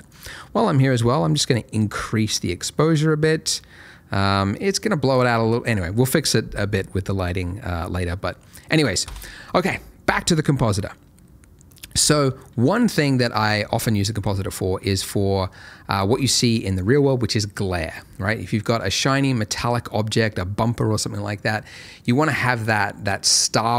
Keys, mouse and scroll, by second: 0.1 click, 5.6-6.5 scroll down 1, 6.5-9.0 scroll up 1, 9.0 Escape, 10.7 middle click, 12.7 alt+middle click, 15.0 middle click.